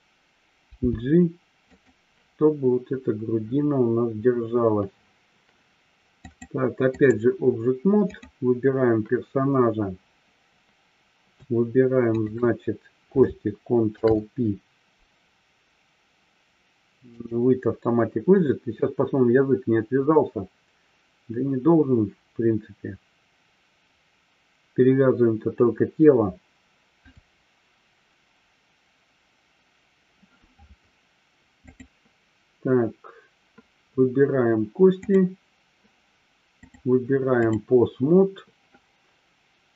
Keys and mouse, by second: 1.7 click, 6.3-7.5 drag, 8.0 click, 12.0 shift+click, 13.9 ctrl+p, 31.7-33.7 drag, 35.0 click, 36.7-37.5 drag.